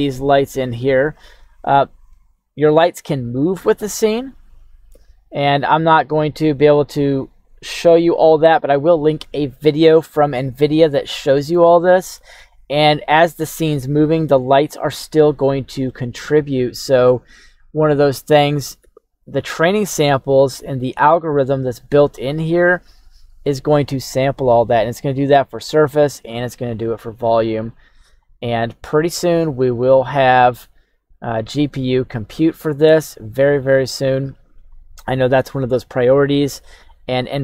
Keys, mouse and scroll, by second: 0.0 right click, 0.0 middle click, 0.0 scroll down 2, 5.1 click, 5.6 middle click, 6.1 shift+middle click, 6.1 shift+scroll down 1, 6.7 g, 10.4-11.5 middle drag, 11.8 middle click, 14.2 middle click, 15.3-15.8 middle drag, 29.5-30.5 scroll up 3, 30.5-31.7 drag, 32.8-33.3 right drag, 33.8 click, 35.5 shift+s.